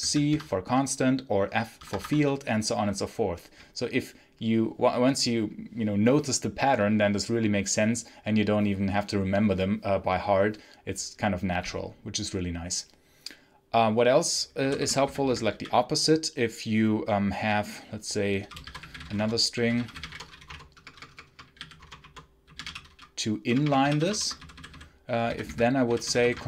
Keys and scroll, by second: 1.7 Escape, 14.2-15.9 typing, 18.0-25.7 typing.